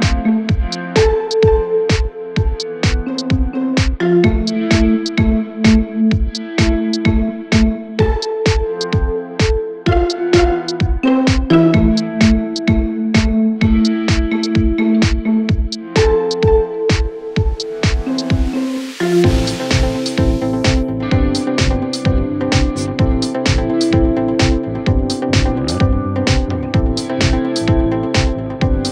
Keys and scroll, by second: 1.9 ctrl+shift+q, 4.3 ctrl+z, 5.2 ctrl+z, 8.6 shift+Page_Down, 9.6 ctrl+Page_Up, 22.9 F3, 23.2 Escape, 27.3 shift+F2, 27.7 Escape.